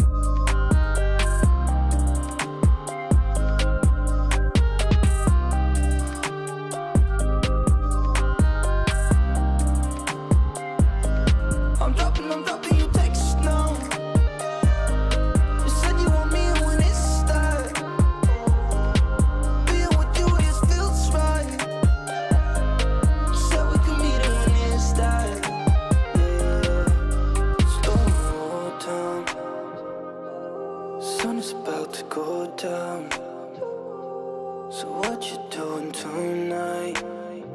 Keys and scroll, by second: 16.1 ctrl+space, 18.8 ctrl+j, 21.4 ctrl+t.